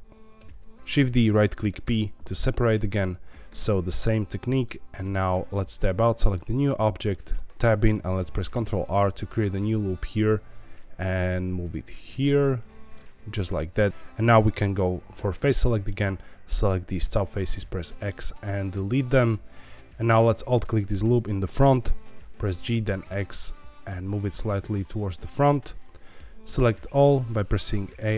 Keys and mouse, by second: 0.3 shift+d, 1.7 p, 3.4 Tab, 4.5 click, 6.2 middle click, 7.2 Tab, 7.9 middle click, 8.5 ctrl+r, 12.8 click, 13.8-15.4 middle drag, 15.4 3, 15.6 middle click, 16.2 click, 17.5 x, 19.2 middle click, 19.8 ctrl+z, 20.4 alt+click, 20.8 middle click, 22.4 g, 22.7 x, 25.6 click, 26.9 a, 27.6 middle click.